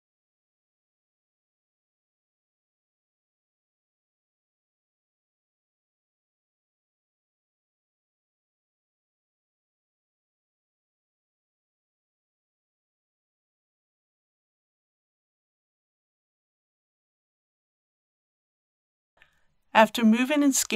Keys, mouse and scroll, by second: 0.3 shift+s, 1.1 KP_0, 2.2 click, 3.0 s, 3.2 y, 3.4 KP_0, 4.5 click, 5.4 s, 5.5 x, 5.7 KP_0, 6.7 click, 7.7 s, 7.9 x, 8.0 KP_0, 8.6 3, 9.0 click, 9.7 l, 10.0 right click, 10.3 click, 10.7 scroll down 1, 11.3 g, 12.0 click, 12.9-17.7 typing, 13.9 click, 16.4 click, 17.5 click, 18.2 click, 19.9 ctrl+space.